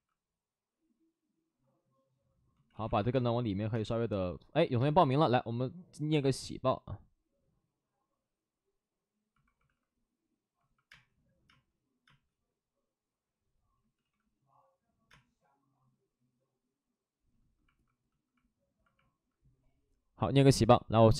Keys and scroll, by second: 2.4 ctrl+z, 2.6 ctrl+z, 3.1 space, 8.2 space, 9.5 alt+s, 9.5 space, 10.8 space, 11.4 space, 12.0 space, 13.7 ctrl+z, 15.0 ctrl+z, 15.0 space, 19.5 space, 19.7 space.